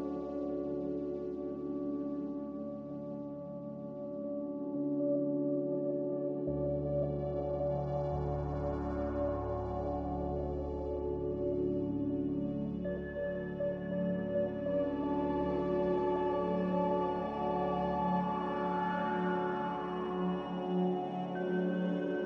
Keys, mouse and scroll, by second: 7.8 z.